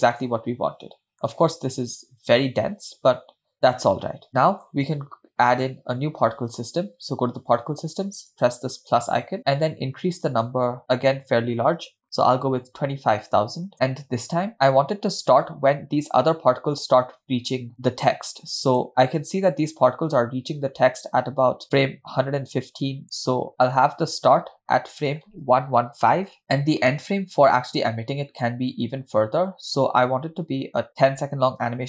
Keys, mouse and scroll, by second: 0.3-1.4 middle drag, 3.2-3.5 scroll up 1, 4.3-4.7 shift+middle drag, 4.3-4.7 scroll down 2, 5.5 click, 8.4-9.0 drag, 10.4-13.7 drag, 12.5 0, 18.9-23.0 drag, 25.2-26.4 drag, 25.9 1.